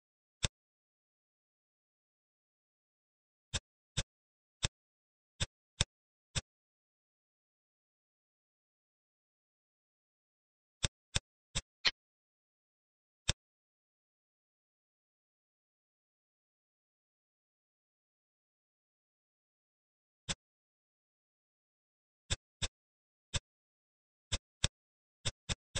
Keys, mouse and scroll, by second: 0.3 click, 3.8 drag, 4.3 Tab, 4.6 click, 5.4 click, 6.3-7.8 middle drag, 10.8-12.8 middle drag, 12.8 ctrl+s, 13.2-14.2 middle drag, 14.2-14.6 scroll up 2, 14.6 scroll down 2, 14.8-16.4 middle drag, 20.2 click, 21.4 `, 22.5 click, 23.0 Tab, 23.2 click, 23.5 Tab, 24.2 click, 24.6 middle click, 25.2 shift+click, 25.4 shift+click, 25.7 shift+click.